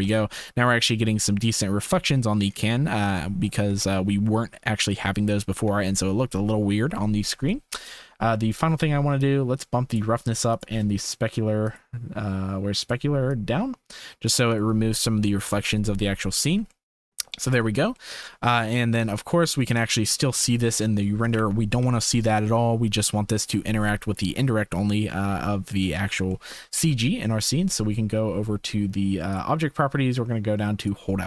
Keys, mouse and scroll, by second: 3.2 shift+middle click, 4.8 ctrl+s, 5.9 shift+middle click, 7.5 shift+middle click, 8.4 middle click, 9.2 click, 10.5 click, 11.6 click, 12.8 click, 13.4 click, 13.9 right click, 16.8-17.1 shift+drag, 18.0 ctrl+s, 18.2 click, 19.6 click, 21.3 KP_0, 22.2 ctrl+s, 26.3 shift+click, 27.1 ctrl+s, 30.8 click.